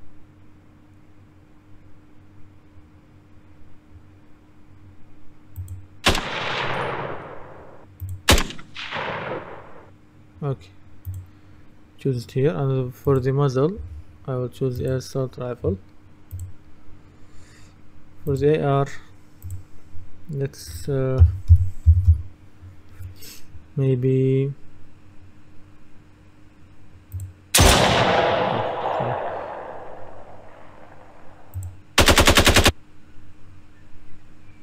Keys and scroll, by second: 21.3-22.6 typing.